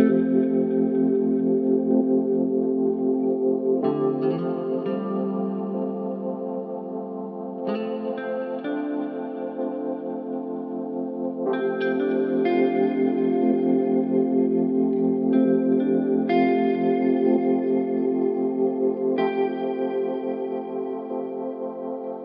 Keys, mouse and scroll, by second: 1.0-9.4 drag, 10.9 click, 13.7-17.0 drag, 19.6-22.2 drag.